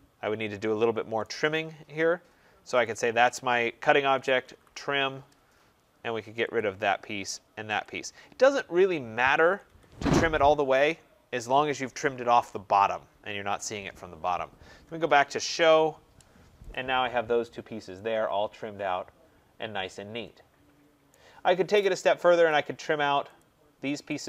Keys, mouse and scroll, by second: 0.0-0.4 typing, 1.1 right click, 1.6-2.6 scroll, 2.7 click, 3.8-4.9 typing, 6.4 click, 7.7 click, 7.7 typing, 9.3 Escape, 9.6 Escape, 9.9 middle click, 10.0 middle click, 10.1 middle click, 14.7-15.7 typing, 15.0 scroll, 16.6 click, 16.9-17.7 scroll, 21.0 right click, 21.5-22.0 scroll, 22.4 click, 23.3 click, 24.1 click.